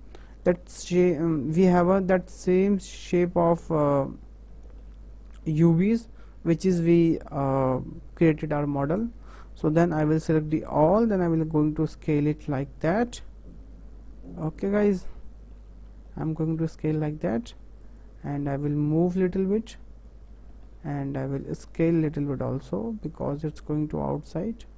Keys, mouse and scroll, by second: 5.5 a, 11.6 s, 18.0-19.2 drag, 21.5-23.3 drag.